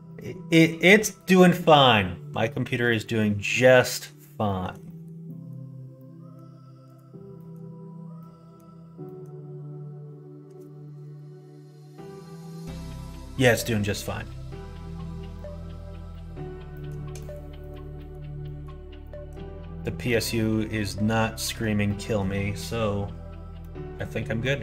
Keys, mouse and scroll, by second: 0.0 middle click, 0.6 middle click, 3.0 middle click, 3.8 middle click, 4.4 shift+middle click, 4.8 middle click, 5.2 middle click, 5.9 middle click, 6.8 click, 7.3 middle click, 8.1 middle click, 9.0 middle click, 15.3 middle click, 16.1 middle click, 16.7 middle click, 17.1 middle click, 17.5 middle click, 17.9 middle click, 18.4 middle click, 19.0 middle click, 19.7 middle click, 21.3 middle click, 21.8 middle click, 23.5 middle click, 24.4 middle click.